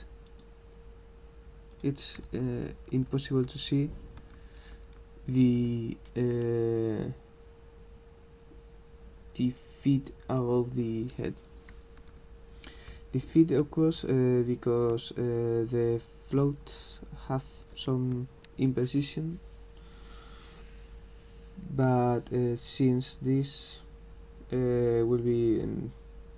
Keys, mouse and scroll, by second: 0.3 click, 1.7 click.